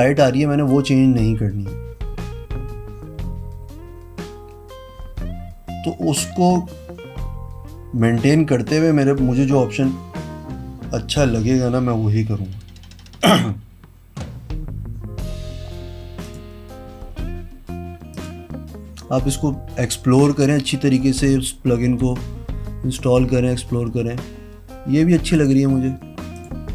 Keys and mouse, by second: 16.4 click, 18.3 click, 25.5 click, 26.6 click.